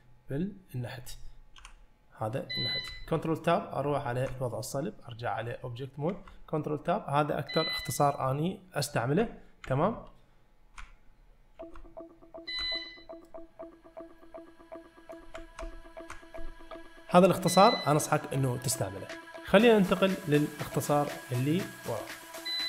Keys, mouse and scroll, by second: 1.6 t, 3.2 ctrl+Tab, 6.3 ctrl+Tab, 9.9 ctrl+Tab, 11.8 ctrl+Tab, 13.3-15.2 middle drag, 15.6 ctrl+Tab.